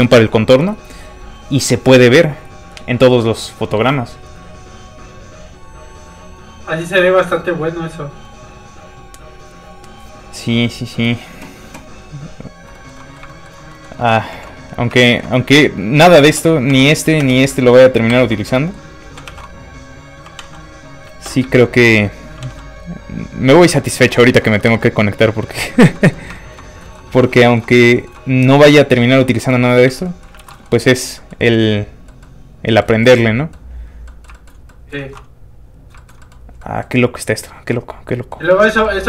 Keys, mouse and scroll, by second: 12.7 shift+middle click, 12.9 middle click, 13.0 middle click, 13.3 shift+middle click, 13.7 middle click, 13.8 middle click, 14.3 alt+h, 14.9 shift+h, 15.0 shift+middle click, 16.2 middle click, 16.3-20.4 typing, 17.5 scroll down 1, 18.5 middle click, 20.0 click, 20.9 click, 21.1 ctrl+space, 21.5 shift+middle click, 21.7 middle click, 22.3 middle click, 22.3 r, 22.5 z, 23.7 click, 23.8 shift+middle click, 24.0 middle click, 24.2 shift+middle click, 24.6 z, 25.7 shift+click, 26.0 shift+middle click, 26.3 shift+middle click, 26.7 scroll down 1, 26.8 shift+middle click, 29.8 alt+shift+z, 30.1 shift+middle click, 30.4 alt+shift+z, 30.6 shift+middle click, 30.8 middle click, 33.0 shift+middle click, 33.2 middle click, 33.3 middle click, 34.3 middle click, 34.7 middle click, 34.8 middle click, 35.0 alt+shift+z, 36.0 shift+middle click, 36.2 middle click, 36.6 middle click, 36.6 scroll down 1, 37.2 scroll up 1, 37.7 middle click.